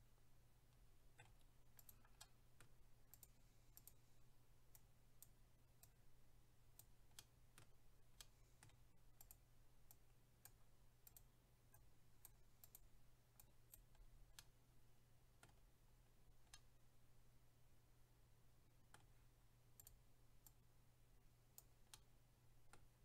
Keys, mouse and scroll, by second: 1.8 click, 1.9 click, 2.2 middle click, 3.1 click, 3.3 click, 3.8 click, 3.9 click, 4.7 click, 5.8 click, 7.2 middle click, 8.2 middle click, 9.2 click, 9.3 click, 9.9 click, 11.1 click, 11.2 click, 11.7 click, 12.6 click, 12.8 click, 13.4 click, 14.0-14.4 scroll down 1, 14.4 middle click, 15.6 scroll down 1, 16.5 middle click, 19.8 click, 19.9 click, 20.4 click, 21.9 middle click.